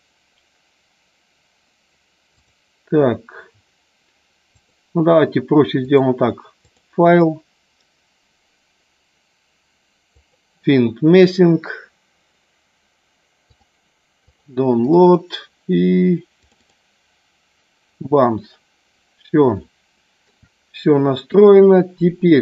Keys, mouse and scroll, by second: 4.6 click, 5.7-6.8 drag, 7.0-10.5 drag, 19.7 shift+middle click, 21.3 click, 22.3 middle click.